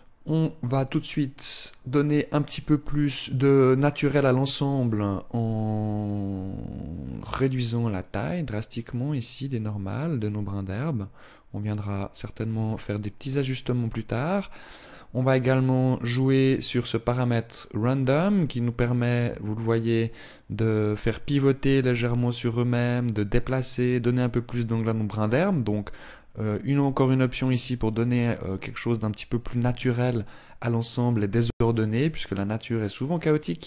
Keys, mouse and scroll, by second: 0.1 click, 6.6-7.6 scroll down 1, 7.6 click, 7.6 scroll down 2, 14.0 click, 16.2 click, 25.5 click, 29.6 click.